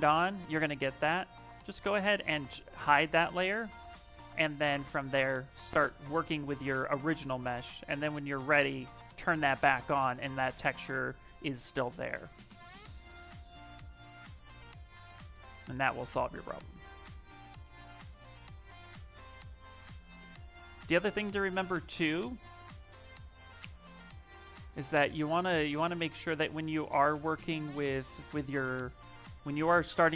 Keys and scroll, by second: 0.5 Escape, 21.2 shift+d, 22.6 d, 24.3-27.5 typing.